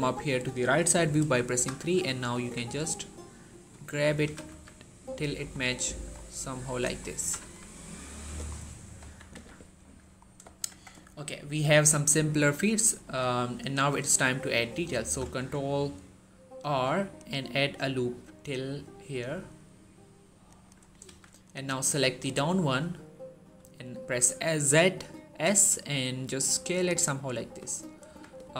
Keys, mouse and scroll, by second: 1.1 scroll up 1, 1.4 typing, 3.3 click, 3.6 shift+middle click, 3.8 scroll up 1, 4.1 typing, 6.6 ctrl+click, 6.8 scroll up 1, 7.0 typing, 8.1 click, 8.3 scroll down 1, 8.8 1, 9.3-9.8 scroll down 1, 10.3 shift+middle click, 10.5 Tab, 10.8 shift+middle click, 11.2-11.8 scroll up 1, 12.1 shift+middle click, 12.9 shift+middle click, 13.3 scroll down 1, 13.9 Tab, 14.8 ctrl+r, 17.0 click, 20.3 click, 20.9 z, 21.5-22.1 drag, 23.4 s, 26.7 click, 27.3 shift+middle click, 27.5-27.9 scroll up 1, 27.9-28.5 typing.